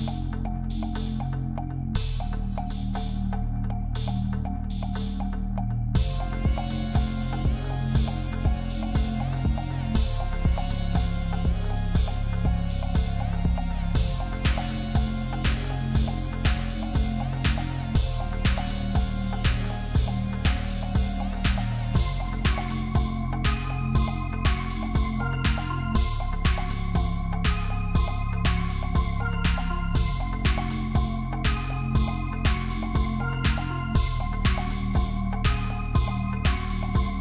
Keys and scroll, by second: 2.4 ctrl+f, 13.8 ctrl+shift+z, 33.7 ctrl+f.